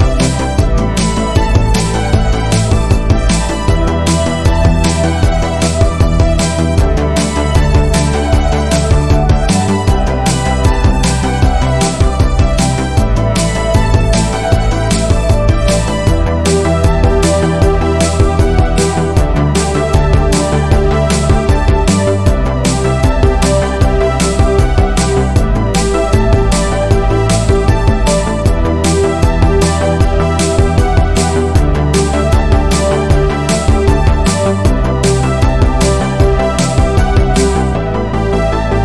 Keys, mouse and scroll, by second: 0.6 2, 0.9 click, 1.4 shift+click, 2.4 shift+click, 3.1 middle click, 3.8 click, 4.9-6.2 middle drag, 6.2 ctrl+z, 6.6 click, 7.6 middle click, 8.4 ctrl+r, 9.6-10.6 middle drag, 10.6 ctrl+r, 12.5 scroll down 1, 12.7-14.5 middle drag, 15.0 shift+middle click, 15.5-16.4 scroll up 4, 15.9 middle click, 16.4 middle click, 16.8 click, 17.3 shift+click, 17.5 shift+click, 18.5-20.4 middle drag, 20.4-21.7 scroll up 1, 21.7 g, 24.0 middle click, 24.9 click, 25.2 shift+click, 25.5 shift+click, 26.0 g, 28.1 click, 28.6 shift+click, 28.9 shift+click, 29.2-30.9 middle drag, 30.9 click, 31.9 ctrl+z, 32.2 middle click, 32.5-32.9 scroll up 1, 32.9 q, 34.1 click, 34.7 g, 35.7 middle click, 36.2 click, 36.4 g, 37.8 middle click, 38.4 2.